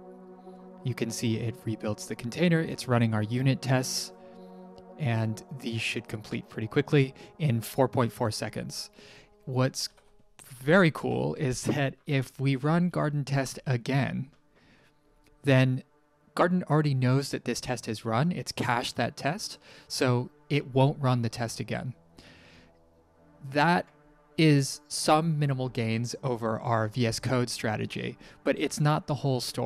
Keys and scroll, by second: 9.4-11.1 typing, 12.2-13.3 typing, 13.3 Return, 18.3 typing.